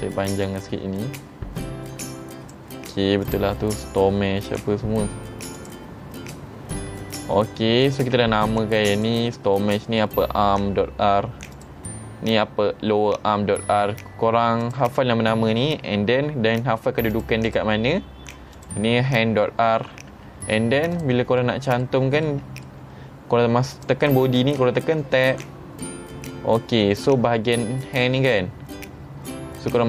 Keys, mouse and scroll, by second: 0.5-2.5 drag, 3.3 click, 5.6 click, 9.0 click, 11.6 click, 14.7 click, 17.1 click, 17.5 click, 18.6 click, 20.2 Tab, 21.0 click, 21.4-21.8 middle drag, 22.3-22.7 middle drag, 23.8 click, 24.9 Tab, 25.4 middle click, 26.3-26.8 scroll up 3.